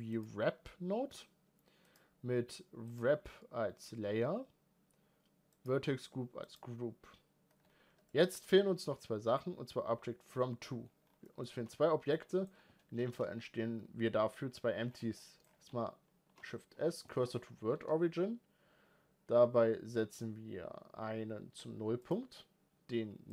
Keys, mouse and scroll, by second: 2.7-7.3 drag, 7.3-7.8 scroll down 4, 7.8-10.8 middle drag, 10.8 scroll down 2, 11.0-11.5 middle drag, 11.5-11.9 scroll up 2, 11.9 middle click, 12.3-13.0 scroll up 2, 13.1-13.7 scroll up 1, 13.7-14.4 scroll up 1, 14.4 scroll up 1, 14.6-15.0 scroll down 7, 15.0 middle click, 15.2 scroll up 2, 15.5 shift+s, 16.5 scroll down 3, 16.7-17.1 shift+middle drag, 17.1 scroll up 2, 19.0 scroll up 1, 23.2-23.3 drag.